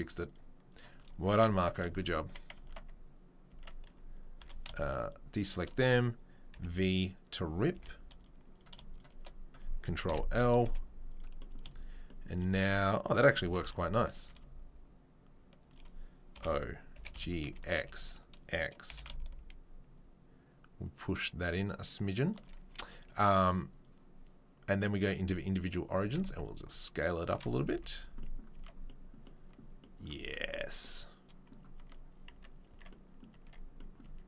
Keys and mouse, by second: 1.6 shift+right click, 1.8-23.8 middle drag, 2.6 Tab, 3.5 Tab, 4.4 2, 6.5 v, 7.7 3, 8.1 click, 8.5 click, 8.9 shift+right click, 10.0 ctrl+l, 10.6 z, 13.4 g, 16.3 o, 23.8-26.2 drag, 26.2-27.3 shift+right drag, 26.2 shift+s, 27.3-34.2 shift+middle drag, 27.7 z, 28.6 Tab, 31.8 Tab, 32.3 Tab, 34.0 Tab.